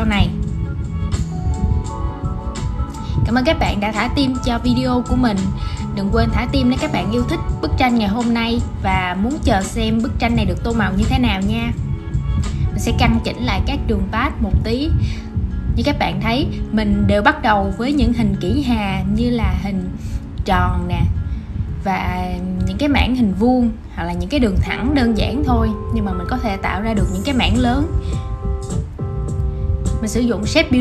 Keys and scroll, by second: 17.5 super+c, 18.2 shift+super+v, 18.7 super+g, 25.5 super+z.